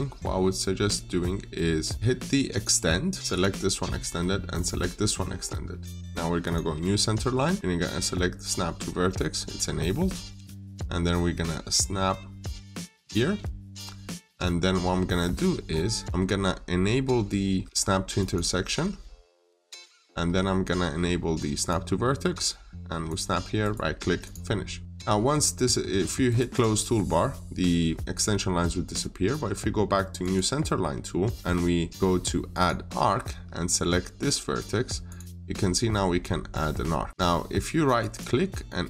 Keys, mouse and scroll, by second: 2.4 click, 23.5 right click, 24.1 click, 26.1 right click, 26.5 click, 33.7 click, 37.9 right click, 38.7 click.